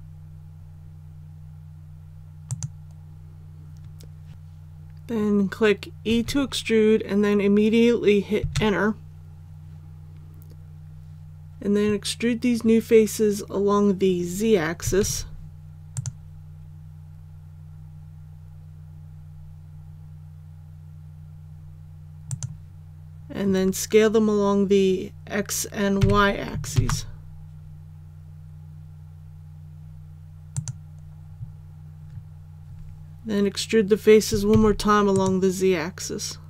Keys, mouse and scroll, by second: 6.0 e, 15.0 alt+e, 15.9 click, 25.9 s, 26.7 shift+z, 30.5 click, 34.5 alt+e, 35.1 click.